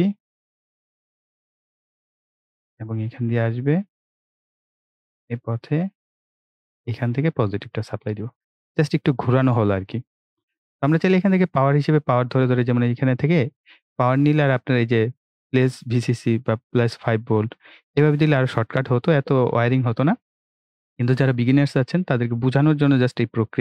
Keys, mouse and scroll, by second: 0.0 click, 1.0 click, 2.9-3.3 scroll up 1, 6.6 click, 9.6 right click, 10.3 scroll down 1, 10.8 click, 13.3-18.9 drag.